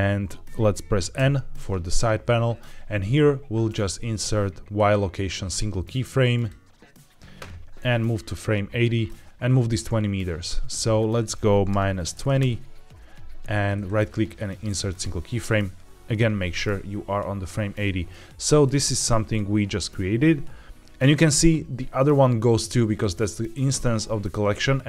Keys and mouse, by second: 1.0 n, 4.7-6.3 right drag, 7.9-8.9 drag, 10.9-12.3 drag, 13.7-14.9 right drag, 18.1-18.5 drag, 18.7 click, 19.2-20.9 drag.